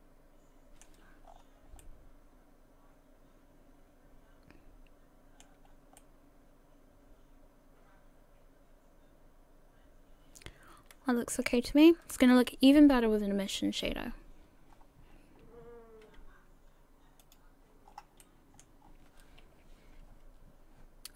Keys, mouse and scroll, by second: 1.3-1.8 scroll down 5, 1.8 middle click, 5.7-6.0 scroll up 1, 6.2 middle click, 6.2 scroll up 1, 13.3 KP_1, 14.7-16.4 scroll up 3.